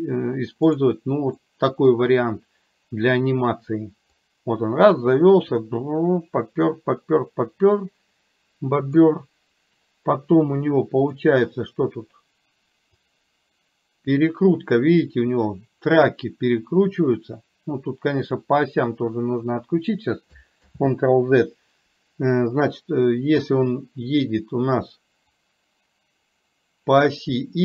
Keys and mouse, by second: 0.8 click, 1.6 middle click, 4.4-9.0 drag, 11.0 click, 13.2-18.5 drag, 20.7 ctrl+z, 25.8-27.6 drag.